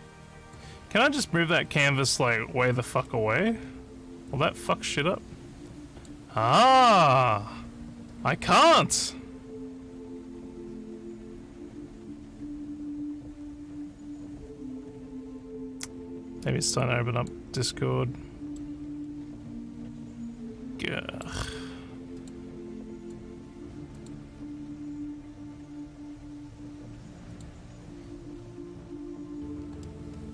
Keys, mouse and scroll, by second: 0.9-2.4 scroll down 9, 2.6-3.5 alt+scroll, 4.3-6.1 drag, 8.1 click, 16.8 alt+click, 17.6-18.6 alt+middle drag, 17.7 alt+scroll up 1, 19.1-21.2 alt+middle drag, 22.2 click, 23.0 click, 23.9 click, 27.3 click, 29.9 alt+middle click.